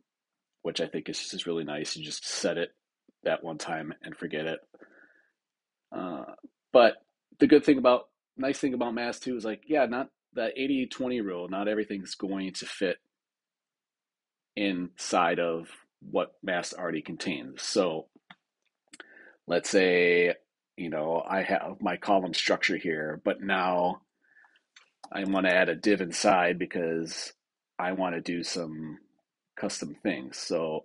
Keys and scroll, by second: 24.9 super+k, 25.4 Return.